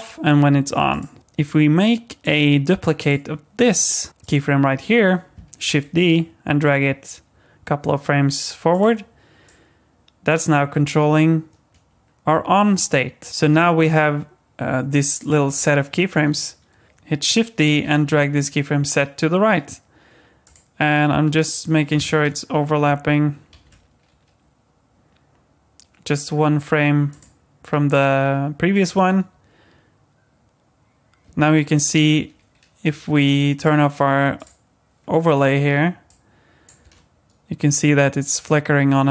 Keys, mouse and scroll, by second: 0.9 click, 2.2 click, 3.0 click, 3.6 click, 4.1 click, 4.2 click, 5.7 shift+d, 9.5 click, 13.3 click, 15.2 click, 15.5 click, 16.8 ctrl+shift+z, 17.8 shift+d, 22.0 ctrl+z, 23.5 shift+d, 27.9 click, 28.9 space, 31.2 space, 33.6 click, 34.4 click, 36.1 click, 36.8 space.